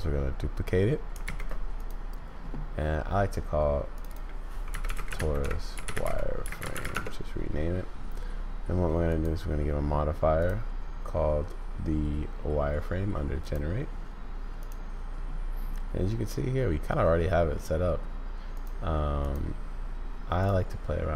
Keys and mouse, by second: 1.2 shift+d, 4.1-7.7 drag, 9.1 click, 10.5-13.5 drag, 14.6 click, 17.2 middle click, 18.5 click.